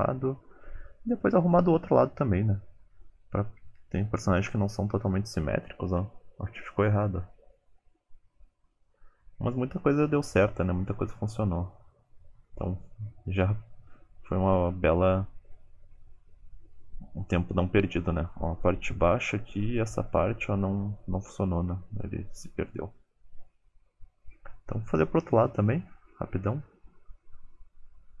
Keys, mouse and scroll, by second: 0.3 click, 0.5 g, 1.1 middle click, 1.6 click, 1.7 g, 2.3 scroll down 4, 2.3 scroll up 1, 2.6 click, 2.7 g, 3.2 middle click, 3.7 KP_1, 4.1 scroll down 1, 4.7-5.3 scroll down 4, 5.6 click, 5.9 ctrl+click, 6.6 click, 6.8 middle click, 7.0 g, 7.7 middle click, 8.4 g, 8.9 click, 9.1 ctrl+click, 9.3 middle click, 9.6 ctrl+click, 9.9 g, 10.3 click, 10.5 g, 10.8 middle click, 11.5 click, 12.0 middle click, 12.7 KP_1, 14.8 shift+middle click, 15.0 scroll up 4, 15.3 shift+middle click, 16.2-16.8 scroll down 5, 17.1-17.8 scroll up 6, 17.4 shift+middle click, 18.0 alt+z, 18.6 click, 18.9 shift+click, 19.0 middle click, 19.8 click, 20.3 middle click, 21.4 click, 21.6 middle click, 22.5 alt+z, 22.9 alt+z, 22.9 middle click, 23.1 g, 23.6 alt+z, 23.7 middle click, 24.1 g, 24.7-25.1 scroll down 5, 24.9 g, 25.7 middle click, 25.9 alt+z, 26.1-26.4 scroll up 4, 26.4 middle click, 26.9 middle click, 26.9 click, 26.9 ctrl+click, 27.0-28.2 typing, 27.1 alt+z, 27.2 middle click, 27.3 alt+z, 27.4 middle click, 27.5 click, 27.6 shift+click, 27.7 click, 27.8 alt+z, 27.9 middle click, 28.0 middle click, 28.0 scroll up 3, 28.1 alt+z, 28.1 middle click.